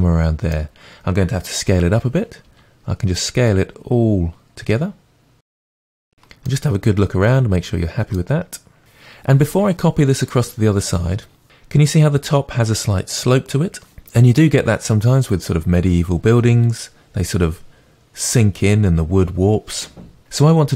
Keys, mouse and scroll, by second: 2.5 s, 7.1 scroll down 2, 7.8 g.